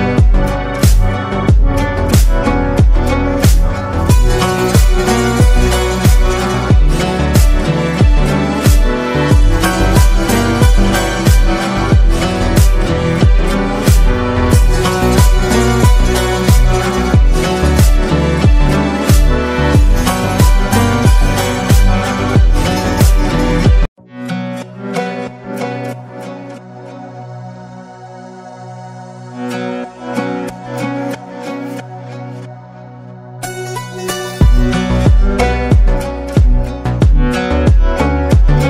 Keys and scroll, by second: 4.0-5.5 typing, 6.7 ], 10.2-10.9 typing, 17.2-18.0 typing, 31.9 ctrl+-, 32.0 ctrl+-, 37.6-38.0 space.